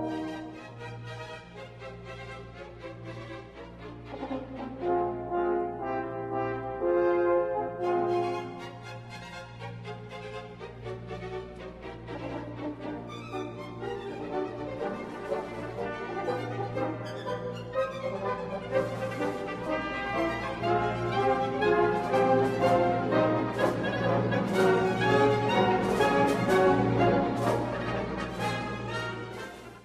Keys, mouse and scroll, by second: 0.7-2.6 middle drag, 3.4-5.3 drag, 7.3 click, 8.6-9.5 middle drag, 10.1-11.0 drag, 11.6-13.8 middle drag, 14.3 shift+middle click, 15.3 z, 16.6 shift+middle click, 19.0-27.9 drag.